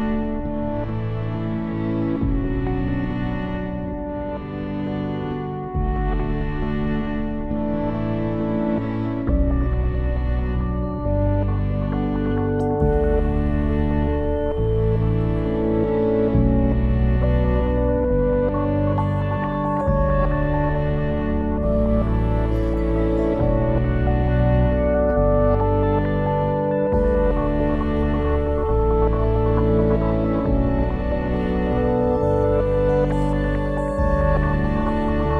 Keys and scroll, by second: 12.7 BackSpace, 14.1 5, 14.9 Return, 26.2 ctrl+s.